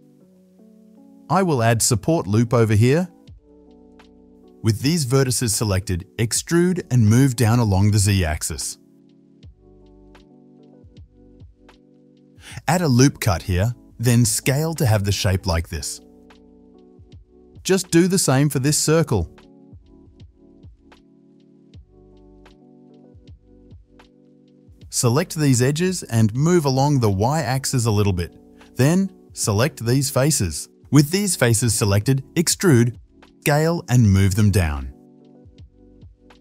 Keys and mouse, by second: 0.2 f, 0.5 click, 0.7-4.3 ctrl+middle drag, 1.3 ctrl+r, 4.3 click, 4.5 shift+middle click, 4.6 alt+shift+click, 4.6-10.1 alt+shift+middle drag, 7.3 e, 10.1 shift+click, 11.0 middle click, 12.0 ctrl+r, 13.7 KP_7, 14.1 shift+a, 14.1 shift+z, 14.7 s, 16.0-17.3 shift+middle drag, 16.1 shift+z, 17.3 click, 17.4-25.5 shift+middle drag, 17.6 shift+z, 18.8 ctrl+r, 19.6 KP_7, 19.7 shift+z, 20.5 s, 22.8 shift+z, 24.8 2, 25.5 ctrl+click, 25.6-27.1 ctrl+middle drag, 27.1-28.8 drag, 28.3 KP_7, 28.8-34.9 shift+middle drag, 28.8 3, 30.3 KP_7, 32.2 e, 33.4 s, 34.9-36.4 drag, 35.7 s.